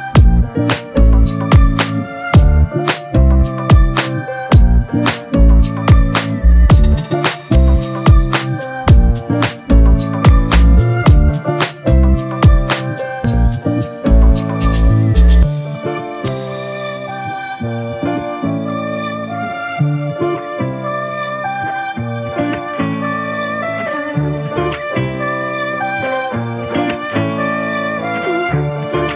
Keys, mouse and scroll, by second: 3.6-4.2 alt+scroll up 1, 4.8 click, 7.7-10.3 drag.